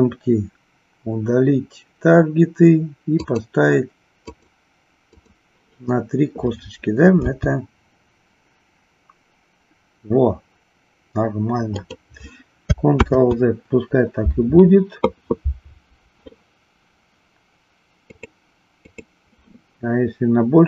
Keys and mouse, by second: 3.3 click, 4.4 click, 5.0 click, 7.3 g, 13.0 ctrl+z, 18.9 click.